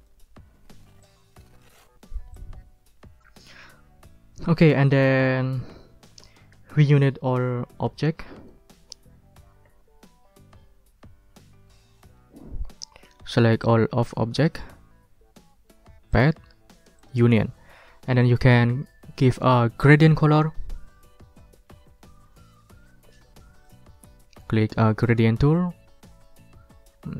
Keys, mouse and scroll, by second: 1.0 click, 2.3 click, 8.5 scroll down 1, 8.7 ctrl+middle click, 11.7 ctrl+scroll down 2, 12.4 ctrl+middle click, 13.6-14.7 drag, 16.1 click, 17.0 click, 17.5-20.7 drag, 25.5 click.